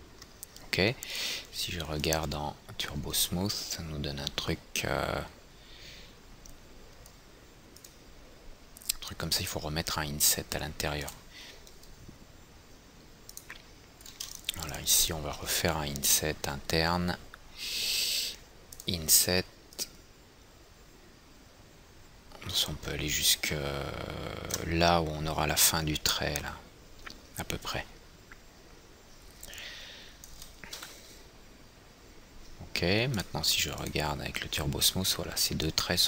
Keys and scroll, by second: 31.1 F3, 32.1 F3.